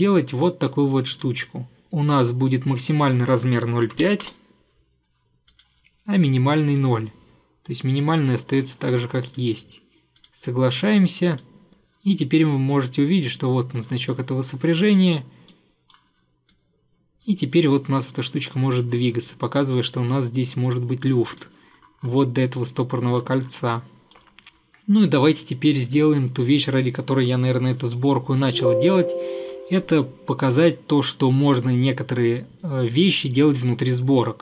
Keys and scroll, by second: 3.8-4.9 typing.